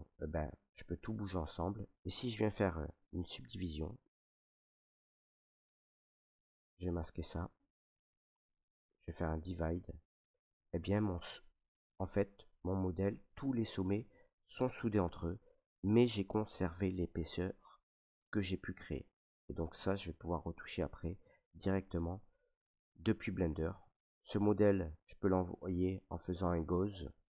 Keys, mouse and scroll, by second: 0.9 click, 1.1 ctrl+z, 3.0 click, 3.6 click, 6.0 click, 7.6 ctrl+click, 7.7 ctrl+click, 9.5 click, 10.2 ctrl+right click, 10.5 ctrl+right click, 11.1 click, 11.6 ctrl+right click, 12.1 alt+right click, 12.7 click, 13.8 right click, 14.0 click, 14.9 right click, 19.6 right click, 20.2 ctrl+right click, 20.4 ctrl+right click, 20.7 alt+right click, 21.3 right click, 22.2 ctrl+z, 23.4 right click, 24.1 ctrl+right click, 26.1 click.